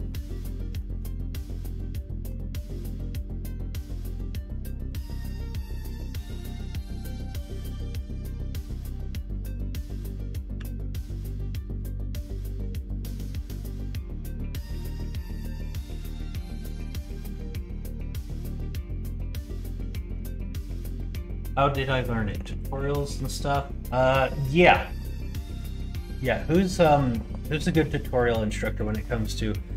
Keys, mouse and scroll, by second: 0.9 middle click, 1.5 middle click, 4.1 middle click, 5.4 middle click, 7.4-8.4 drag, 10.5 a, 11.7 ctrl+a, 13.5 middle click, 14.3-15.4 middle drag, 15.9 shift+middle click, 16.2 middle click, 16.6 middle click, 17.4 middle click, 17.9-20.1 middle drag.